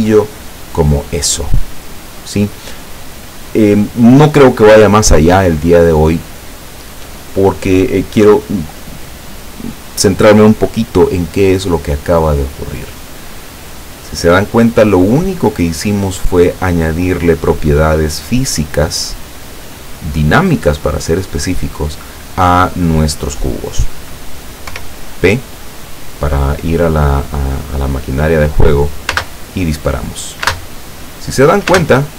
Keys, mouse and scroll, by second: 24.7 p, 29.2 space, 31.0 space, 31.8 space.